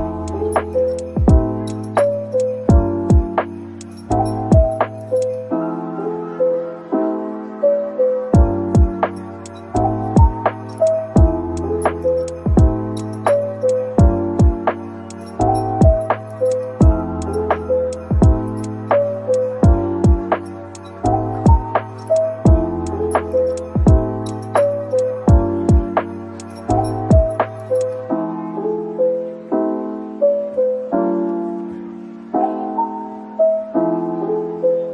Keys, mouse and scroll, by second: 2.8 scroll down 1, 4.1 scroll down 1, 4.5 scroll up 1, 7.9 Tab, 8.7 /, 14.5-15.5 scroll down 1, 19.1 scroll down 1.